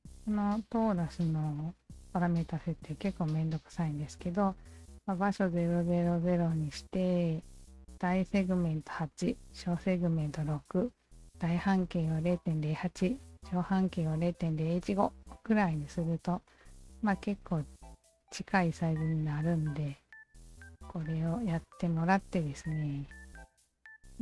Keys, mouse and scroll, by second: 16.5-17.2 alt+drag, 17.7-18.0 alt+right drag, 18.2 alt+middle click, 18.6 alt+right drag, 19.0-20.4 drag, 19.0 alt+middle click, 20.9 Tab, 21.5 alt+click, 22.5 alt+right click, 22.9 alt+middle click, 23.2 alt+right click.